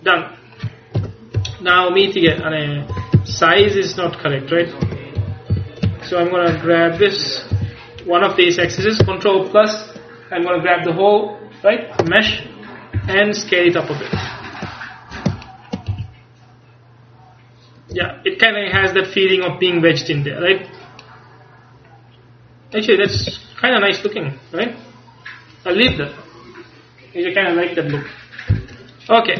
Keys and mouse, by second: 1.0 KP_1, 1.4 KP_3, 2.4 Tab, 3.0 Tab, 3.2 z, 4.0 a, 4.9 Tab, 5.2 a, 5.7 a, 7.6 a, 9.1 ctrl+KP_Add, 9.6-13.1 ctrl+KP_Add, 13.1 s, 14.4-16.0 middle drag, 16.0 z, 18.0 Tab, 18.9 a, 23.2 ctrl+s.